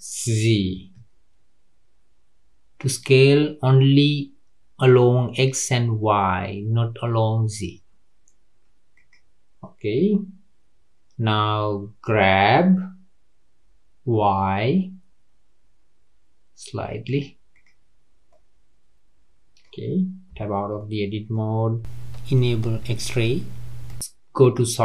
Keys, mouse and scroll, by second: 12.1 g, 17.5 click, 18.3-20.3 middle drag, 20.3 Tab, 20.7-23.9 middle drag, 24.4 click.